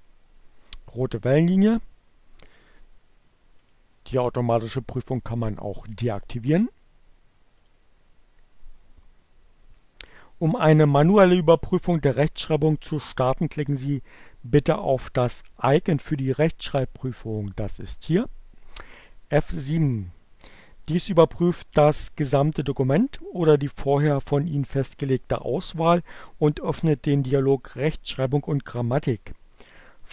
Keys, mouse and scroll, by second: 2.8 click, 7.0 click, 19.5 click.